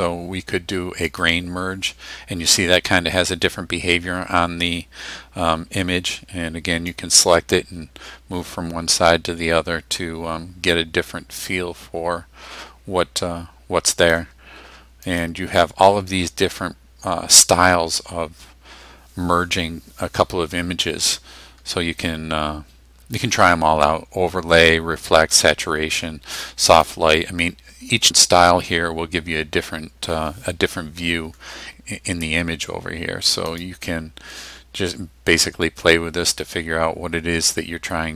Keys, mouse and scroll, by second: 1.1 click, 6.9-14.2 drag, 15.0 click, 26.7 click, 33.5 click.